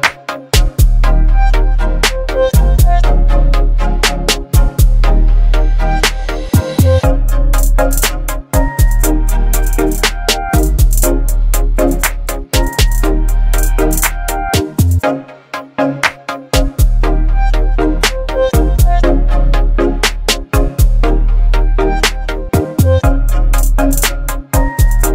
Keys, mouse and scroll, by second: 2.7 click, 6.7 click, 11.6 click, 11.6 click, 15.8 click, 19.2 click.